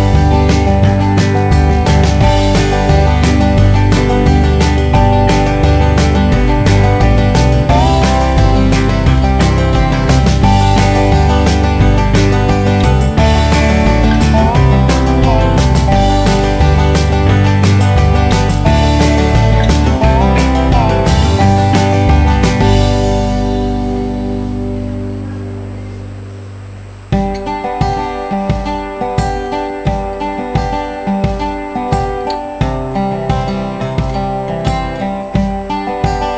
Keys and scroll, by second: 0.4 ctrl+KP_Add, 0.8 ctrl+KP_Subtract, 6.9 ctrl+z, 13.7 ctrl+KP_Add.